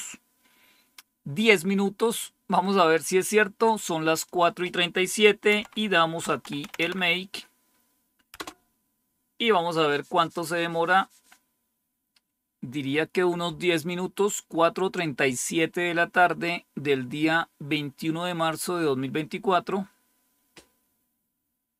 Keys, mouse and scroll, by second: 1.2-4.2 scroll down 2, 4.2 click, 5.4-7.2 typing, 8.3 Return, 10.3 typing.